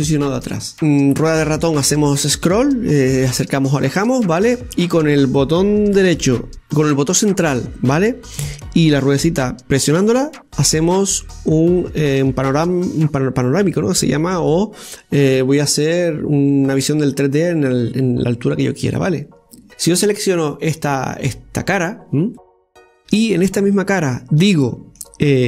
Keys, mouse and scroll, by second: 0.7 scroll down 3, 1.0-1.8 scroll up 6, 1.8 scroll down 4, 2.8-3.1 scroll down 6, 3.1-4.0 scroll up 8, 4.7 scroll down 5, 5.0 scroll up 1, 5.6 scroll down 5, 8.7 scroll up 1, 10.7-13.7 middle drag, 19.7 click, 20.2 right click, 23.3-25.4 middle drag.